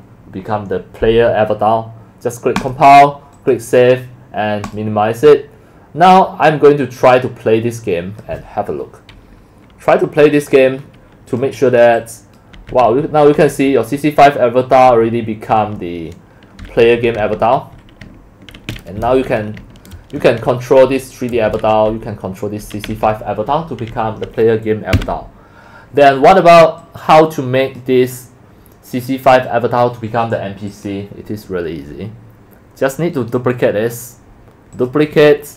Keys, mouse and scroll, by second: 2.6 click, 3.4 click, 4.7 click, 5.0 click, 5.4 click, 7.0 click, 7.5 click, 8.2 click, 10.0 click, 10.8 click, 11.3 click, 11.6 right click, 12.0 click, 12.6 w, 12.9 s, 15.4-19.7 typing, 20.9-25.4 typing, 26.8 click, 29.3 click, 35.1 click.